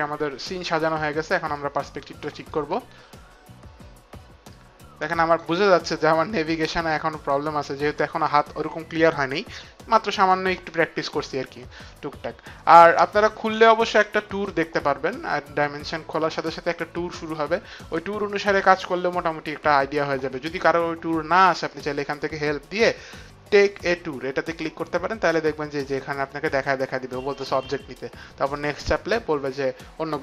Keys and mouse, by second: 1.6 click, 2.4 right click, 21.7 click, 23.8 click, 28.5 click.